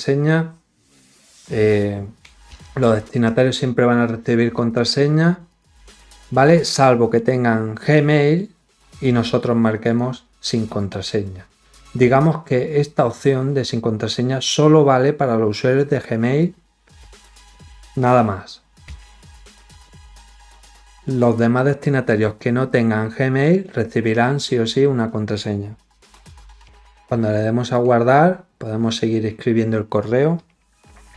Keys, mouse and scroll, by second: 5.4 click, 9.7 click, 27.6 click.